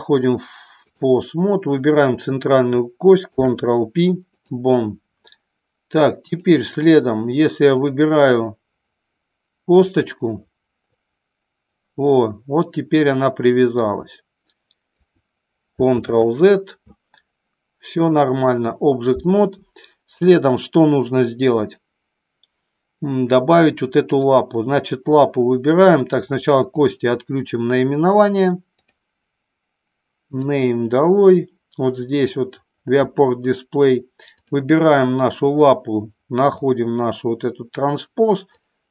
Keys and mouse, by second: 1.6 click, 3.2 ctrl+p, 6.2 click, 7.7 click, 9.7 click, 11.0-15.0 drag, 16.1 ctrl+z, 18.0 click, 34.2 click, 36.5 click, 38.5-38.9 drag.